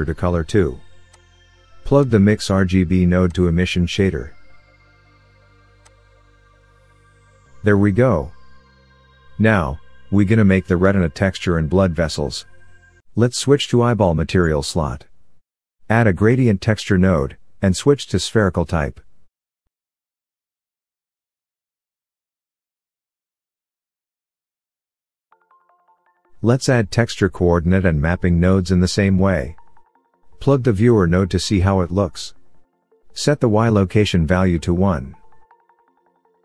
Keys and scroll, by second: 19.6 shift+a, 27.7 ctrl+t.